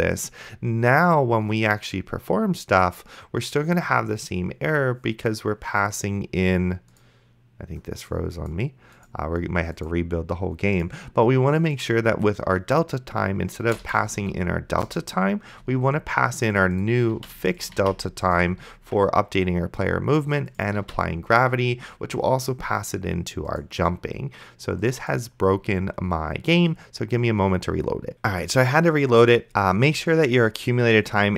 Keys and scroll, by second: 13.8-14.7 typing, 14.9 Return, 17.4 ctrl+c, 18.1 ctrl+v, 21.1 ctrl+s.